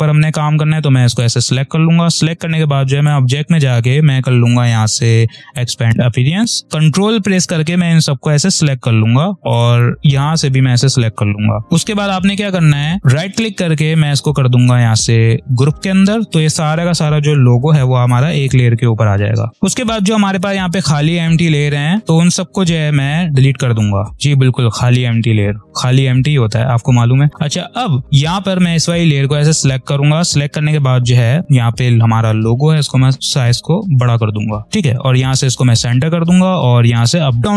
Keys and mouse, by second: 1.0 click, 5.5 click, 6.6 ctrl+click, 9.6 ctrl+click, 13.0 right click, 15.4 click, 17.8 ctrl+-, 18.4 click, 19.9 click, 22.1-25.6 drag, 30.5 ctrl+-, 32.7-35.6 alt+shift+drag.